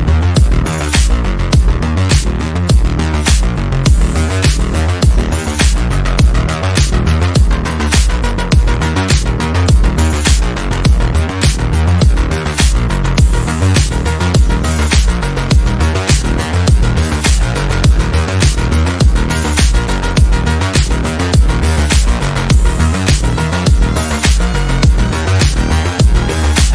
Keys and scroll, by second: 25.2 F3.